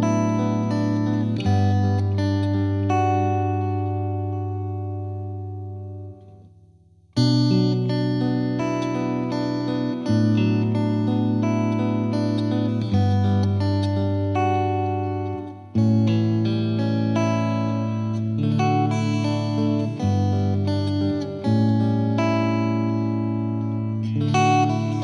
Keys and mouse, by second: 0.4 click, 3.6-4.8 right drag, 5.1-6.2 drag, 7.4-8.4 drag, 10.7-11.8 drag, 15.4 click, 16.5 click, 17.8 click.